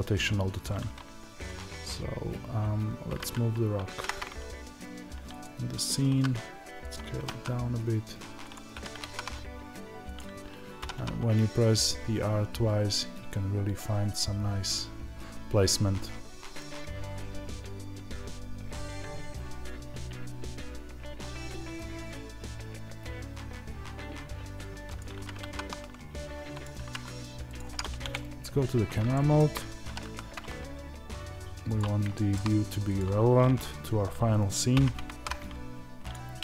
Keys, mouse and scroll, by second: 3.0-5.3 right drag, 3.0 g, 5.3 click, 8.4 click, 10.0 click, 27.5 click, 27.9 KP_0, 29.0-32.9 shift+middle drag, 29.8 r, 32.3-32.9 shift+scroll down 3, 32.9 click.